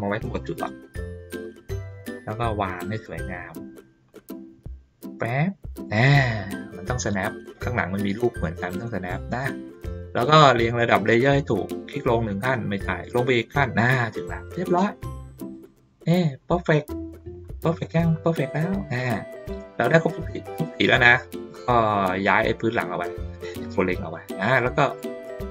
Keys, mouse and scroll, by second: 0.3 click, 1.9-7.1 drag, 8.4-9.7 ctrl+middle drag, 11.1 click, 12.8 click, 15.5 click, 16.9 ctrl+middle click, 17.4 ctrl+middle click, 18.4 ctrl+middle click, 19.1 ctrl+middle click, 22.4-24.1 drag, 24.6-25.5 drag.